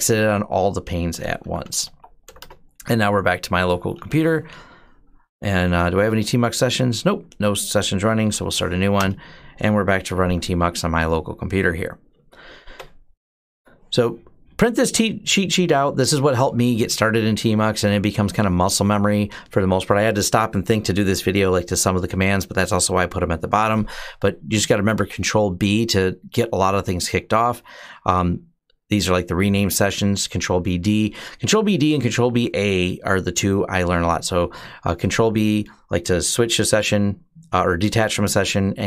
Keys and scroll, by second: 1.0-4.2 typing, 5.2-5.9 typing, 7.8-8.5 typing, 8.7 Return.